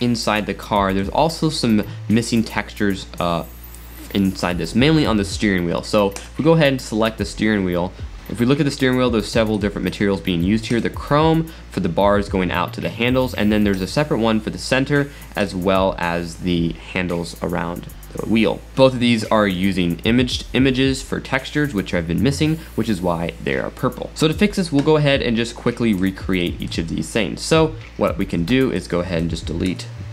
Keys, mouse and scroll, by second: 1.2 scroll up 2, 1.8-2.2 shift+middle drag, 2.4 middle click, 3.3 scroll up 1, 6.1 click, 7.6 scroll down 3, 8.1 click, 9.5 click, 9.9 click, 10.7 click, 12.1 scroll up 1, 13.7 click, 15.4 click, 18.8-20.8 middle drag, 24.1 click, 25.9-28.8 middle drag, 28.8-29.9 drag, 29.9 x.